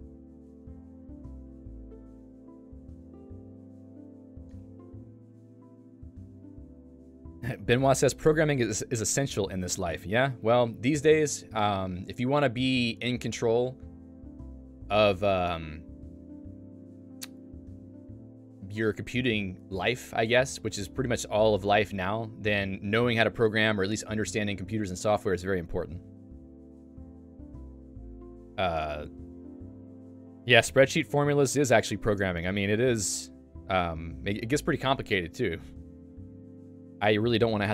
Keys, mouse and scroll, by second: 4.0 click, 4.2 Escape, 4.5 click.